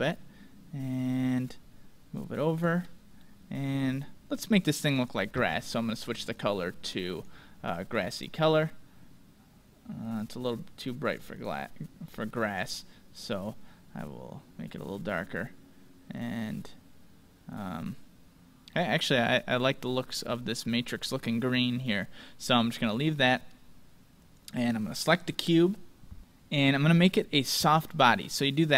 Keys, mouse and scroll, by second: 2.2-4.1 drag, 3.2-4.9 middle drag, 4.5-9.0 drag, 12.5-14.4 drag, 18.7-20.6 middle drag, 24.2-26.2 right drag.